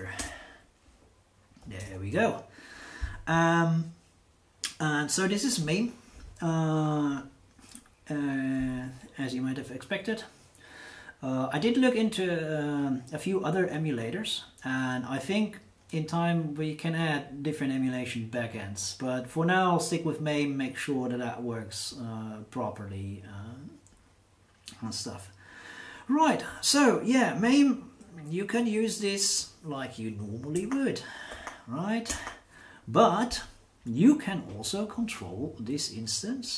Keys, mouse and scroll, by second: 0.2 Return, 1.8 super+Return, 30.5 b, 31.3 2, 32.1 Return.